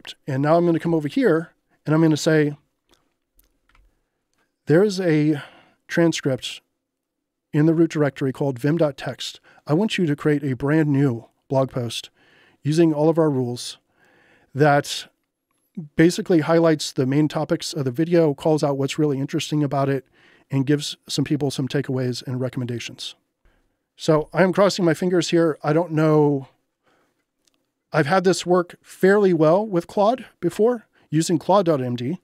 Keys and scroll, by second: 0.8 ctrl+h, 23.4 Return.